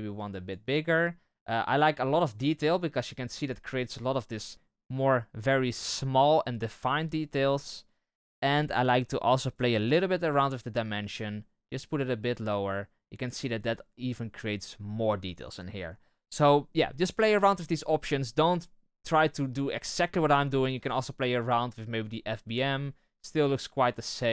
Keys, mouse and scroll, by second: 3.0-8.7 scroll up 1, 8.7-10.9 scroll up 1, 10.9-13.5 drag, 13.5-14.7 scroll down 1, 14.7-15.9 scroll down 1, 15.9-19.4 scroll down 1, 19.4-22.1 scroll down 1, 22.1-24.3 drag.